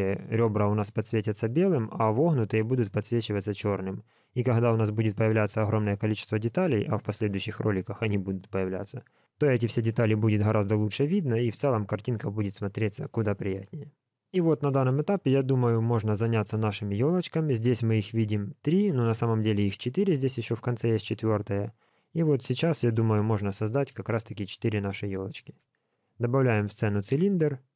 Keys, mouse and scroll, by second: 3.4 middle click, 4.2 scroll up 1, 5.6 shift+middle click, 11.2 middle click, 19.6 middle click, 20.8 middle click, 23.0 KP_1, 24.1 shift+middle click, 25.4 shift+a.